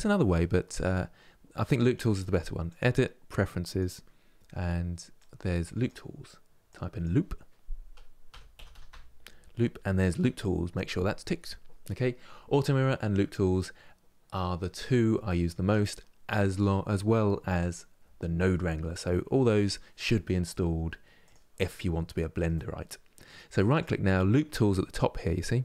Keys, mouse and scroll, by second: 2.4-21.5 drag, 21.5-23.4 middle drag, 23.4-25.6 right drag.